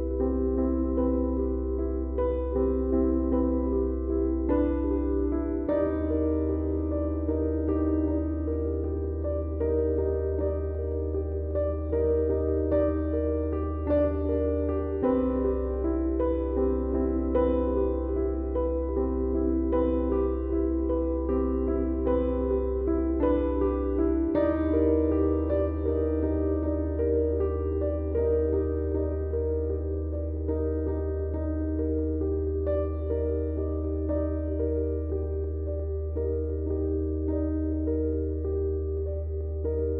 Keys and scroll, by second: 4.5 Delete, 9.0 ], 12.2 4, 12.7 ctrl+d, 12.8 Escape, 29.2 0.